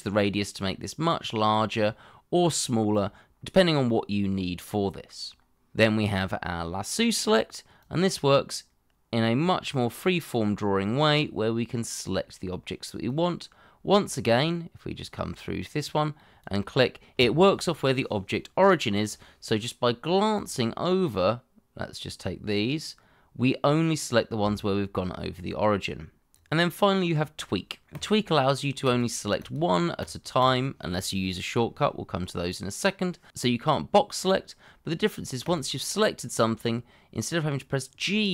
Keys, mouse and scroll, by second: 30.4 double click.